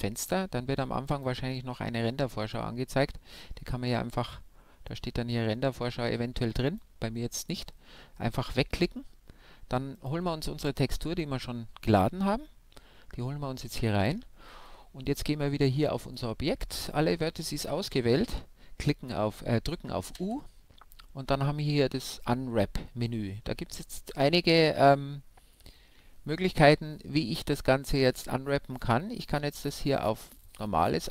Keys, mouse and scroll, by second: 1.1-3.2 middle drag, 2.5-4.3 drag, 7.5-9.3 drag, 10.1-12.7 middle drag, 17.7 u, 29.4-31.1 middle drag.